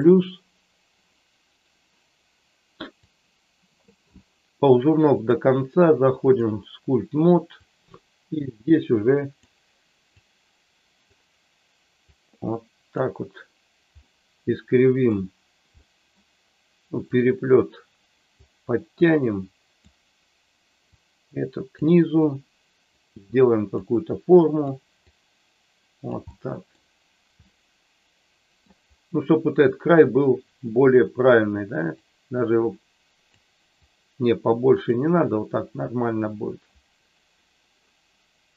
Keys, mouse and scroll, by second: 3.1 click, 5.1-6.4 drag, 7.5-9.4 drag, 10.0-11.0 drag, 12.0-13.0 drag, 14.0-15.1 middle drag, 15.8 middle click, 17.0-18.4 drag, 19.0 click, 20.9 click, 22.3 click, 23.5 click, 24.2 click, 25.0-26.1 drag, 26.3 middle click, 27.4-28.6 middle drag, 32.0-33.4 drag, 33.7-34.9 drag.